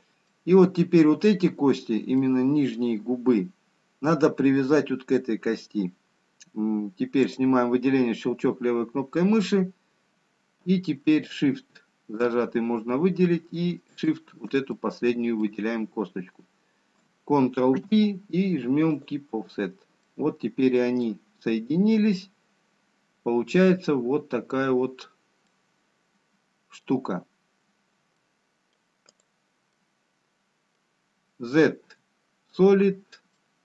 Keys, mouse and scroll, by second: 2.3 middle click, 8.0 click, 11.5 shift+click, 15.8 shift+click, 15.8 middle click, 18.5 ctrl+p, 20.5 middle click, 22.1-22.6 scroll down 2, 23.2 middle click, 24.7-25.6 scroll down 1, 26.2 middle click, 27.6-28.0 scroll down 1, 30.0 middle click, 30.0 click, 32.0 z, 33.2 scroll up 1.